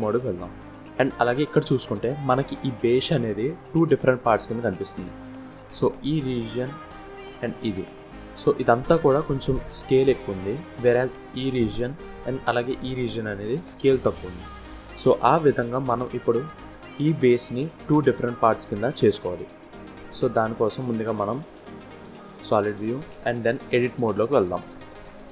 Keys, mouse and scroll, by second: 0.5 scroll up 1, 1.0 shift+middle click, 5.1 click, 6.9 click, 9.4 click, 10.6 click, 12.1 click, 13.6-14.2 scroll down 1, 17.1-17.5 scroll down 2, 17.6 middle click, 19.2 scroll up 1, 19.5 Tab, 21.2 z, 22.8-23.8 scroll up 1, 23.8 click.